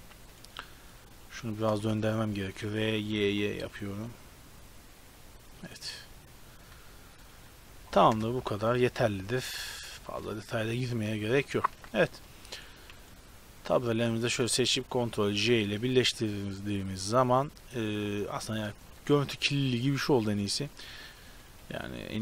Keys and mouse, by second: 1.9 shift+space, 2.7 r, 8.2 KP_0, 8.7 Tab, 10.0 shift+space, 11.9 ctrl+s, 15.5 ctrl+j, 18.5 Tab, 20.7-22.2 typing.